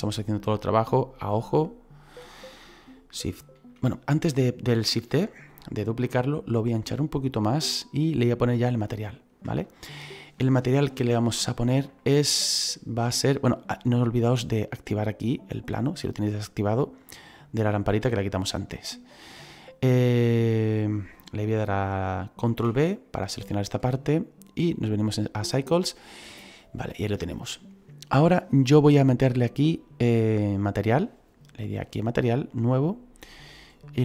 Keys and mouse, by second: 1.5 click, 4.2 middle click, 7.0 click, 9.0 middle click, 9.5 shift+middle click, 11.9 middle click, 15.2 click, 18.2 shift+middle click, 22.4 ctrl+b, 22.9 click, 24.8 click, 31.7 click, 33.9 click.